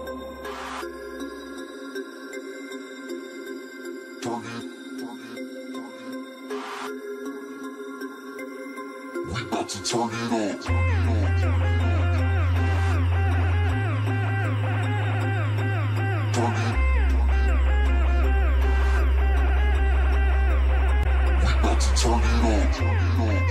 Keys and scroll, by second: 1.7 ctrl+space, 2.6 ctrl+space, 4.8 ctrl+space, 7.3 ctrl+alt+space, 18.8 ctrl+z, 20.9 ctrl+space.